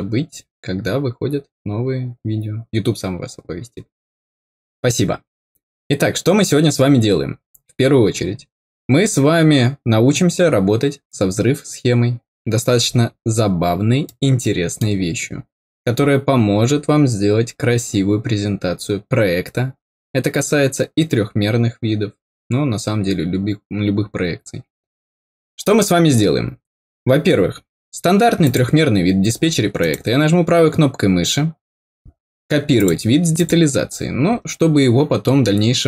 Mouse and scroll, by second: 8.9 middle click, 9.1-9.7 scroll down 2, 14.0 middle click, 26.5 middle click, 28.3 click, 29.7 right click, 32.7 click, 33.3 click.